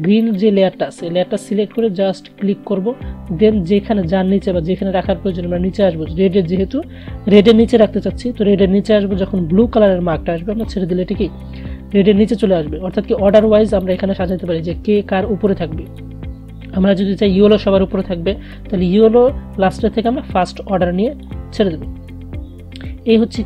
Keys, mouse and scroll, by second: 13.3 click, 19.8-23.4 drag.